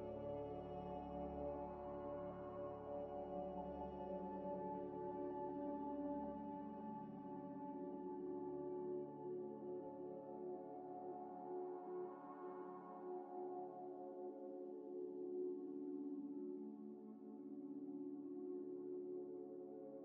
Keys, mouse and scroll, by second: 1.9 scroll up 1, 2.4 middle click, 5.6 scroll up 1, 5.9 middle click, 11.0 scroll up 1, 11.0 middle click, 11.3 z, 13.0 click, 13.0 double click, 13.8 z, 14.1 z, 14.2 scroll down 1, 14.5 Tab, 15.0 shift+a, 16.4-17.7 typing, 19.3 double click.